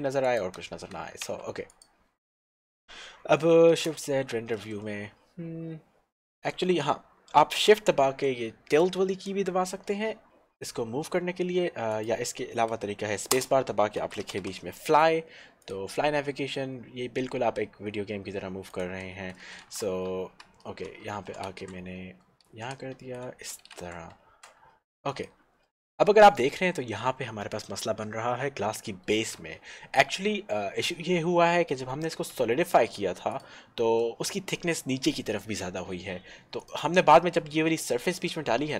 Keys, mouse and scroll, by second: 0.4 click, 1.5 Tab, 1.7 click, 2.5-3.8 scroll up 1, 3.9 shift+z, 12.2 click, 13.5 space, 14.1 f, 14.3 l, 14.6 y, 15.7 click, 18.9 right click, 20.2 shift+w, 22.6 shift+w, 23.7 w, 24.2 z, 25.3 click, 32.4 Tab, 33.6 click, 36.7 click, 37.8-38.1 scroll down 1, 38.6 middle click.